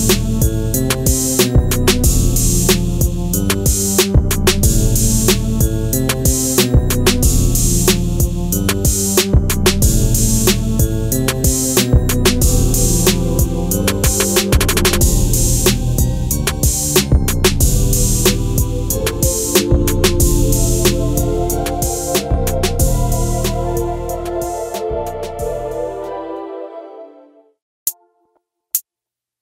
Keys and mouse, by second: 0.2-1.4 right drag, 2.7 s, 3.9 click, 4.7 click, 5.7 Delete, 6.9 middle click, 8.8 click, 9.4 click, 10.6 ctrl+shift+b, 12.9-14.1 right drag, 15.3 click, 15.6 middle click, 16.3 s, 18.1 click, 18.8 Delete, 19.8-22.3 middle drag, 22.8 click, 23.7 middle click, 25.4 Delete, 26.8 ctrl+z, 27.9 Delete, 28.4 KP_1.